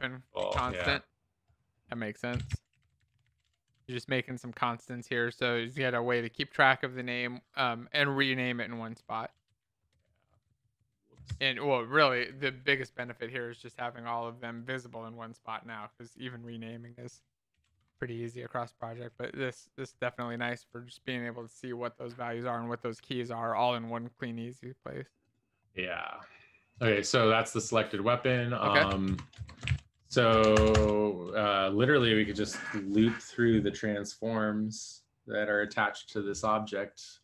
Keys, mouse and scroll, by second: 0.0-0.7 typing, 2.1-4.2 typing, 4.6 shift+End, 5.0 shift+Left, 5.9 ctrl+s, 5.9 Left, 6.2 Left, 6.4 Left, 7.9 Return, 8.3 ctrl+b, 9.2 ctrl+s, 9.2 Down, 9.4 Up, 9.9 Left, 11.3 ctrl+shift+Left, 12.2-14.5 typing, 16.3-18.3 typing, 18.7 ctrl+s, 19.3 ctrl+s, 19.3 Left, 19.3 Down, 20.3 alt+Left, 20.9 ctrl+s, 22.3 Right, 22.4 Right, 23.2 ctrl+s, 23.2 Down, 23.8 Down, 29.1 shift+Return, 29.8 ctrl+s, 29.8 Up, 30.0 Return, 30.5 Tab.